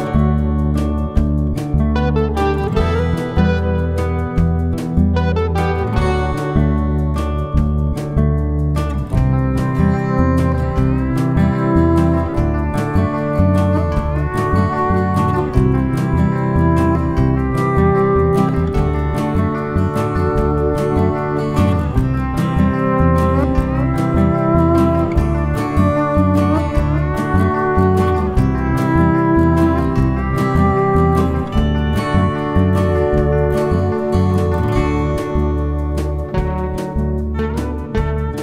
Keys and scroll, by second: 1.6 typing, 4.1-6.0 typing, 13.3 typing, 20.8 shift+F6, 24.2 F1, 28.2 F1, 29.0 Page_Down, 30.2-31.1 typing, 36.9 F7.